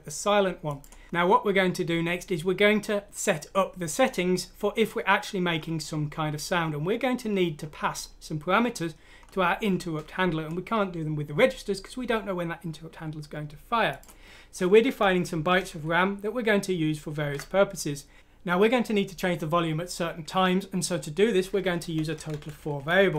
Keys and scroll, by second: 15.0 Home, 15.3 typing, 22.0 Home, 22.3 typing.